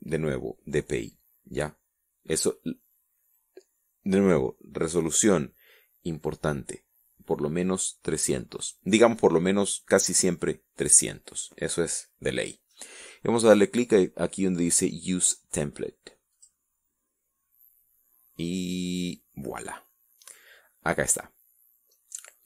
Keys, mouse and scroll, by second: 16.6 click, 20.6-21.2 scroll down 2, 21.2 scroll up 2.